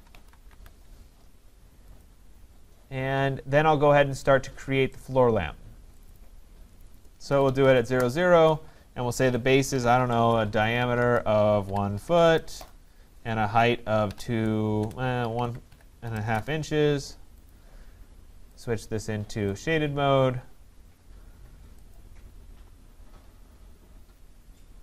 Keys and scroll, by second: 7.9 Return, 10.3 BackSpace, 11.0 Return, 16.2 BackSpace, 16.4 Return.